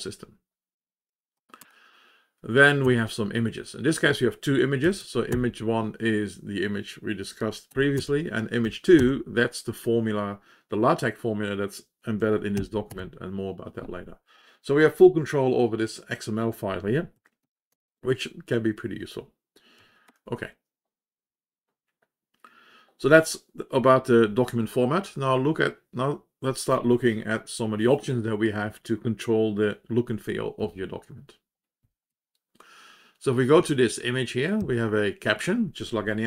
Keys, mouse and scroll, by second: 2.8 Down, 4.8 Down, 5.0 Down, 5.5 Return, 8.6 Up, 8.9 Return, 30.5-31.5 Down, 31.7 Down, 32.2 Page_Down, 33.6 Up, 34.5 Up.